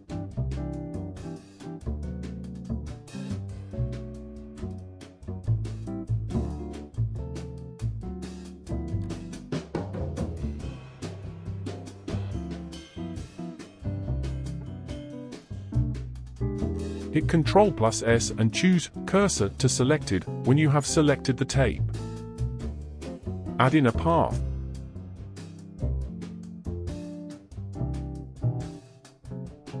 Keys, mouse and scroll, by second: 0.6-1.2 scroll down 2, 1.2-3.2 shift+middle drag, 3.2-4.9 drag, 4.9-6.2 middle drag, 6.2 space, 8.6 space, 11.1-14.1 drag, 14.3-14.6 middle drag, 14.6 ctrl+z, 18.2 shift+s, 20.8-22.6 middle drag, 22.6 shift+a, 25.5-28.2 middle drag, 28.2 KP_1, 29.1-29.8 scroll down 2.